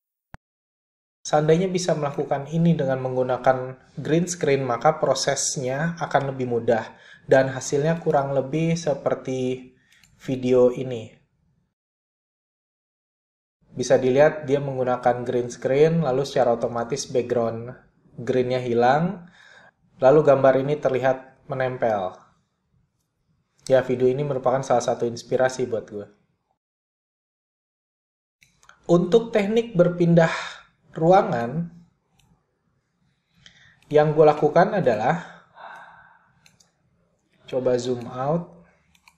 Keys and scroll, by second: 33.4 BackSpace, 35.8-36.5 typing.